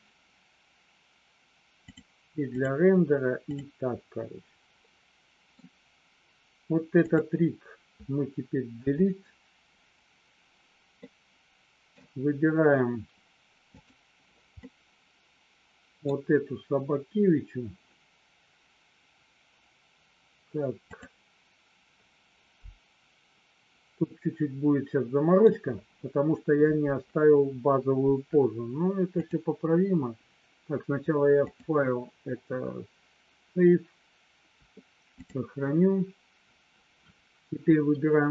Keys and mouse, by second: 2.5 click, 3.5 click, 4.9 middle click, 7.0 click, 8.7 Delete, 11.0 middle click, 13.7 click, 14.6-16.0 middle drag, 20.9 click, 24.0-25.4 middle drag, 29.2 click, 31.4-35.2 drag.